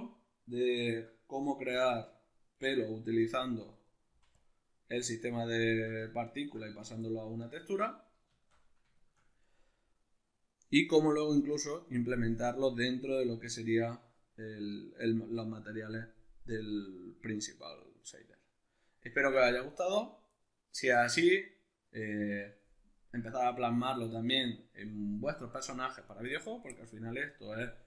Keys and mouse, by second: 0.9 x, 2.1 right click, 2.7 x, 3.3 right click, 3.7 x, 5.3-6.3 shift+middle drag, 6.3 right drag, 6.6-27.8 shift+middle drag, 7.9 alt+q.